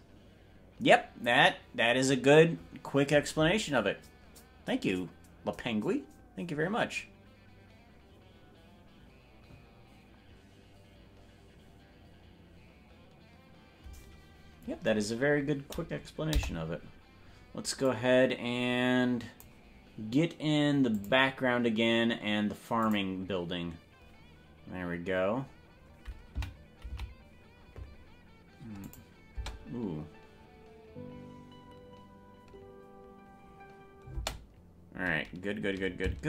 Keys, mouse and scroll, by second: 16.3 KP_0, 17.8-19.5 drag, 22.4 click, 23.4 click, 26.5 Right, 27.1 Left, 28.9 click, 29.3 space, 34.3 space.